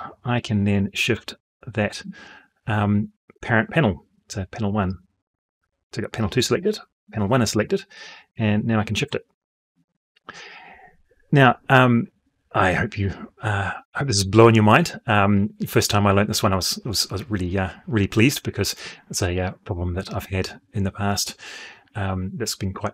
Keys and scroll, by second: 6.1 Escape.